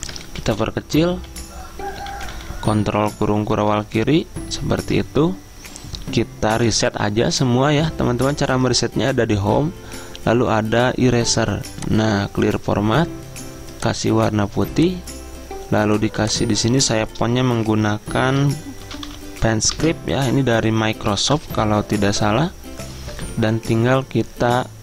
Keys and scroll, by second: 0.0-2.0 typing, 3.8 ctrl+], 4.5 ctrl+], 18.6-19.6 typing, 19.8 Return, 21.4 ctrl+], 21.6 ctrl+], 21.8 ctrl+], 22.0 ctrl+].